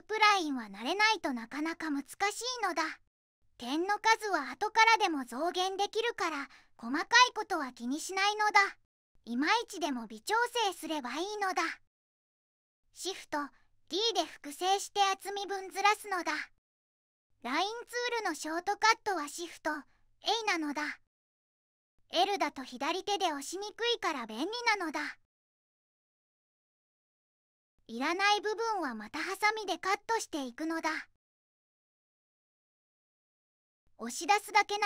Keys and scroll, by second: 8.0 1, 11.9 2, 12.8 d, 31.5 2, 32.4 j, 33.8 j.